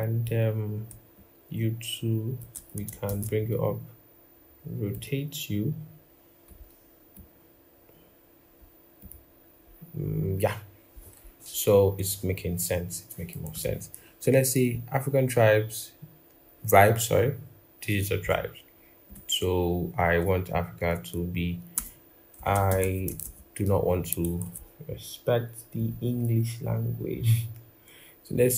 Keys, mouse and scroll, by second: 0.9 alt+click, 2.9 ctrl+shift+], 9.5-10.7 scroll up 1, 10.7 scroll, 11.3-11.7 scroll down 1, 11.7-12.2 scroll, 12.2 scroll up 1, 13.3 t, 21.5-22.8 typing, 28.3-28.5 typing.